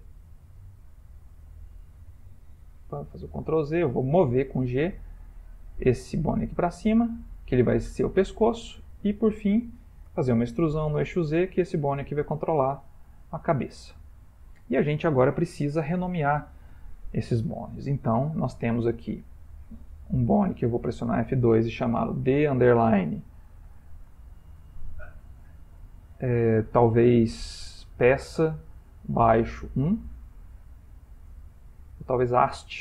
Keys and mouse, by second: 0.0 e, 1.6 x, 3.1 ctrl+z, 4.3 g, 7.9 shift+middle click, 10.2 e, 14.1 shift+middle click, 14.2 shift+middle click, 14.6 shift+middle click, 18.9 click, 21.0 F2, 23.8 BackSpace, 23.9 BackSpace, 31.9-32.8 typing.